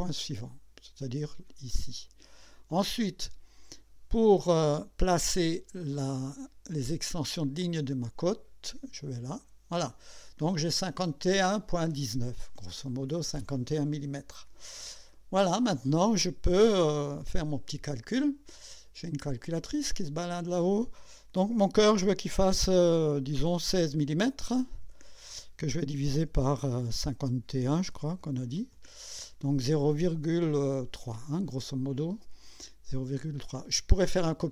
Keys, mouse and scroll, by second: 1.5 click, 6.9 y, 9.0 click, 9.8-10.5 scroll down 4, 19.5 click, 24.7 KP_1, 24.9 KP_6, 26.3 KP_Divide, 27.9 KP_5, 28.2 KP_1, 28.7 KP_Enter.